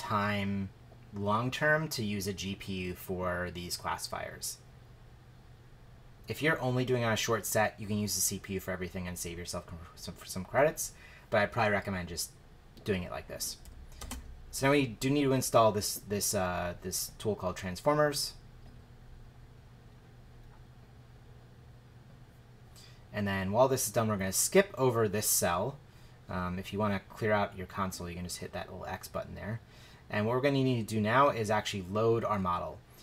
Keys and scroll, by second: 14.0 shift+Return.